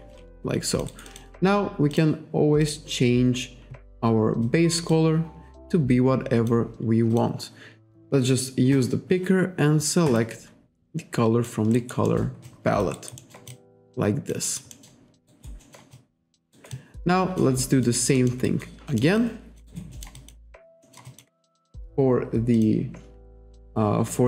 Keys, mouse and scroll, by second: 0.4 alt+click, 0.9 alt+right click, 1.1 alt+click, 2.0 click, 2.7 click, 4.5 click, 4.9 click, 7.2 click, 8.8 click, 10.8 alt+click, 11.8 alt+right click, 12.1 alt+middle click, 12.5 alt+click, 13.2 alt+middle click, 13.6 alt+click, 15.3 alt+right click, 15.7 alt+middle click, 16.0 alt+click, 16.6 alt+right click, 16.8 alt+click, 17.9 alt+click, 18.2 alt+middle click, 18.5 alt+right click, 18.9 alt+middle click, 19.2 alt+click, 19.7 alt+right click, 20.2 alt+click, 20.9 alt+middle click, 21.1 alt+click, 22.6 click.